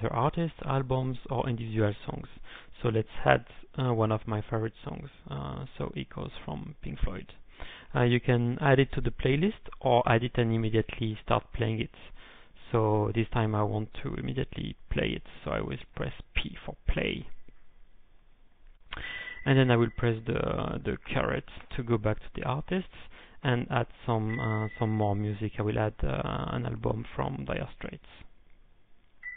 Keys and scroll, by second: 0.2 Return, 3.6-4.3 typing, 6.8 shift+Right, 7.1 ctrl+p, 18.5-19.2 typing, 22.3-23.7 typing, 26.9-29.0 typing.